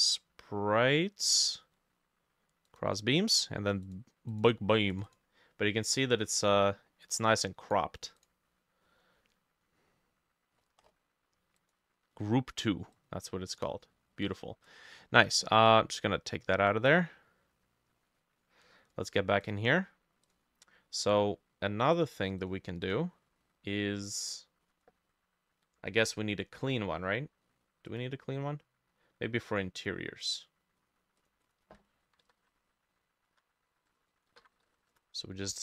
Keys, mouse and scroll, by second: 3.1-7.1 drag, 3.2 scroll down 2, 8.9-12.9 drag, 8.9-9.2 scroll down 1, 10.6-11.9 scroll down 9, 22.5-24.9 drag, 31.5-35.6 drag, 31.9-35.4 typing, 32.6 shift+middle click.